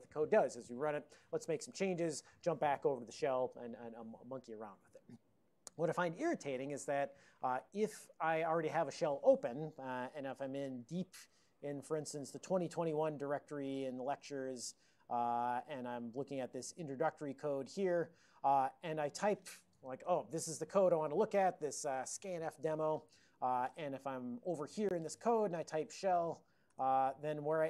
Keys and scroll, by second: 10.0 alt+o, 10.5 ctrl+x, 10.6-12.5 typing, 12.5 Return, 13.6-14.4 typing, 15.5-16.5 typing, 16.7 Return, 17.7 ctrl+d, 25.5-26.7 typing, 26.7 Return.